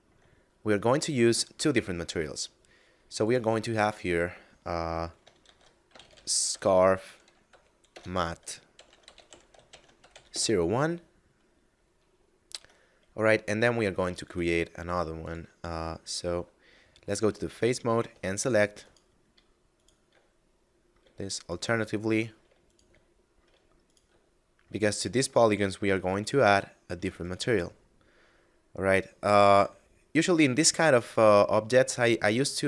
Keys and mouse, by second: 0.1 middle click, 3.2 click, 5.3 shift+s, 5.8 c, 5.8 a, 6.0 r, 7.7 BackSpace, 9.0-10.0 typing, 10.2 Return, 12.5 Tab, 14.1 ctrl+Tab, 15.1 click, 17.5 shift+middle click, 18.7 alt+right click, 19.6 alt+shift+right click, 20.2 shift+middle click, 21.3 alt+shift+right click, 21.8 shift+middle click, 22.5 alt+shift+right click, 23.0 shift+middle click, 23.7 alt+shift+right click, 24.2 shift+middle click, 24.9 alt+shift+right click, 25.3 shift+middle click, 26.2 alt+shift+right click, 26.6 shift+middle click, 27.1 alt+shift+right click, 27.6 shift+middle click, 31.8 middle click.